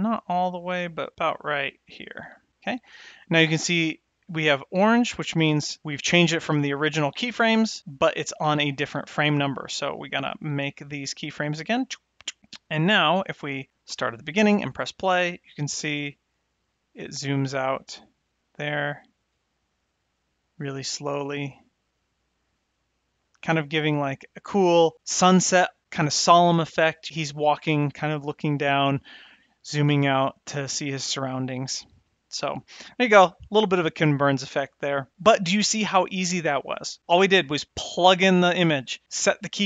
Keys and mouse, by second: 10.1 click, 10.7 click, 11.3 click, 11.8 drag, 13.8 shift+Left, 14.4 space, 24.0 space.